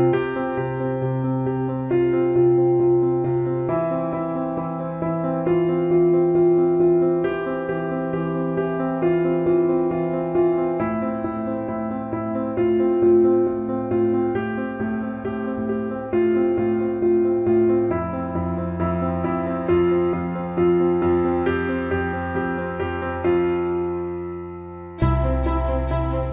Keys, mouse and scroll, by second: 1.3 shift+click, 2.1-4.2 drag, 5.5-6.7 drag, 6.8 alt+middle click, 7.6 alt+middle click, 10.9 alt+shift+middle click, 12.1 alt+shift+middle drag, 15.2 click, 18.9 click, 19.6 click, 22.1 shift+a, 25.2-26.3 drag.